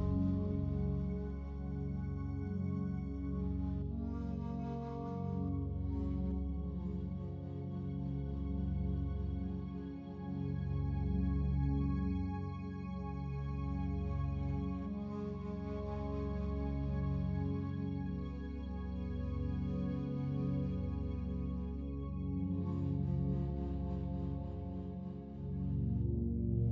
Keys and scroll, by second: 1.9 Escape, 13.2 ctrl+z, 14.2 ctrl+z.